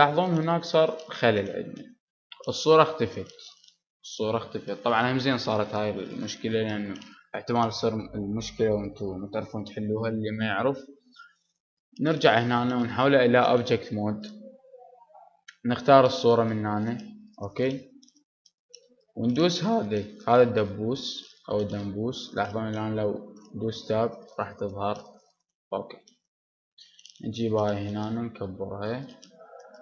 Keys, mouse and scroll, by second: 0.4-12.9 middle drag, 12.9 Tab, 13.5-17.3 middle drag, 17.3-23.3 drag, 23.3 Tab, 26.3 middle click, 26.3 g, 28.1 click, 28.1 s, 28.9 middle click, 29.5-29.8 drag, 29.5 s.